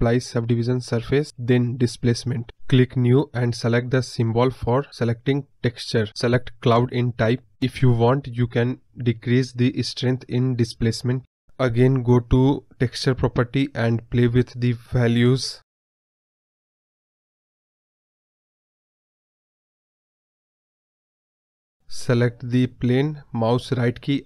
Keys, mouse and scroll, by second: 3.6-6.8 drag, 6.8 scroll up 1, 9.2-16.5 drag, 16.5 scroll up 1, 16.6 middle click, 16.8 scroll down 1, 16.9 middle click, 17.6 click, 18.3 scroll up 1, 18.4-19.0 middle drag, 19.0-20.5 drag, 21.2 scroll down 2, 21.3-21.8 middle drag, 21.8 scroll up 1, 21.9-22.5 middle drag, 22.5 scroll up 4, 22.7-23.1 scroll down 2, 23.1 click, 23.4-24.2 right drag.